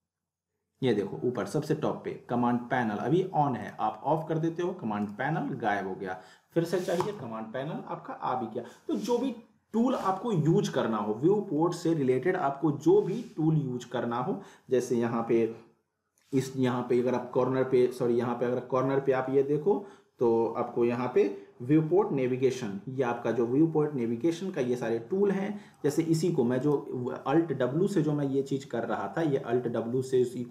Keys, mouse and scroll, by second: 3.6 click, 3.6 click, 5.0 right click, 5.0 right click, 7.0 click, 25.8 click, 28.5 alt+w.